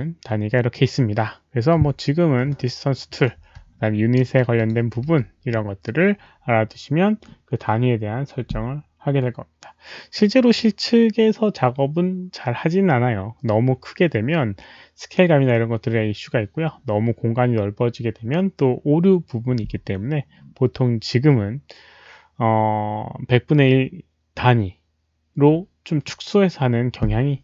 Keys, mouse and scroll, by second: 1.5 alt+click, 1.5 alt+middle click, 1.5 alt+right click, 1.5 w, 1.8 Delete, 3.6-3.9 alt+scroll down 1, 4.1 alt+middle drag, 4.5 alt+click, 4.8-5.6 typing, 5.1 alt+middle click, 12.6 alt+middle click.